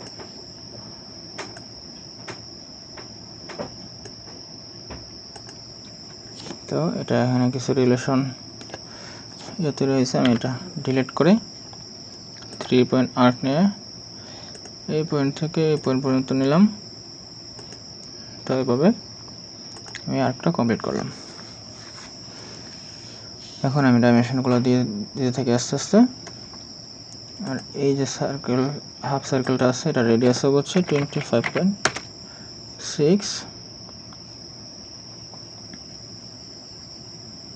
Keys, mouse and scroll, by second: 10.3 Delete, 25.8 right click, 30.7-31.4 typing, 31.8 Return.